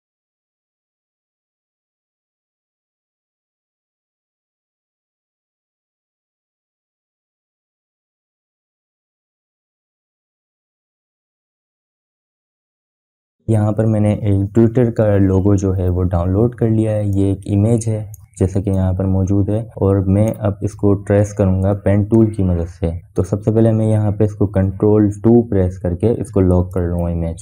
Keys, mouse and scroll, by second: 20.2-26.8 drag, 27.2 ctrl+2.